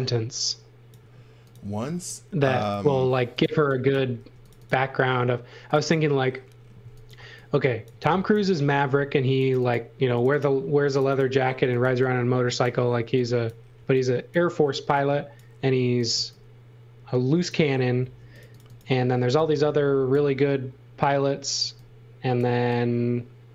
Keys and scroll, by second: 0.0-2.2 typing, 3.5 x, 4.2 b, 6.8 x, 7.1 v, 7.9 x, 8.9 b, 11.3-14.7 typing, 15.8 x, 16.1 v, 18.0 space, 19.1 x, 21.6 x, 22.4 v.